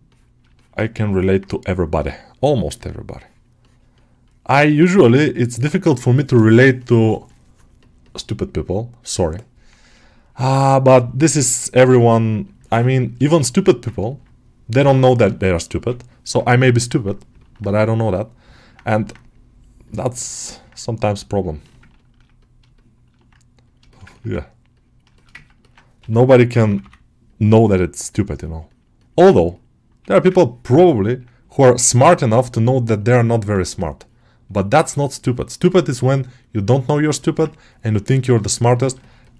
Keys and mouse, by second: 0.4 shift+middle click, 0.7 middle click, 1.9 g, 3.5-5.0 drag, 6.4 click, 7.1-12.8 middle drag, 12.9 middle click, 13.2 shift+middle click, 13.5 middle click, 13.9 ctrl+middle click, 14.6 g, 15.1 ], 15.6 ], 16.5 middle click, 17.3 middle click, 18.4 middle click, 18.8 alt+middle click, 20.0 alt+middle click, 20.3-21.8 alt+middle drag, 22.2-23.9 middle drag, 24.0 ctrl+alt+middle click, 25.0 shift+middle click, 25.2 ctrl+middle click, 25.5 alt+middle click, 25.8 g, 26.4 [, 26.5 [, 28.5-29.7 middle drag, 30.3-32.1 ctrl+drag, 32.1 shift+middle click, 32.6 click, 33.1 click, 33.5 alt+middle click, 33.8-35.5 drag, 35.5 middle click, 35.9-37.2 middle drag, 37.5-38.6 ctrl+drag, 38.6 ctrl+alt+middle click, 38.9 shift+middle click, 39.1 alt+middle click.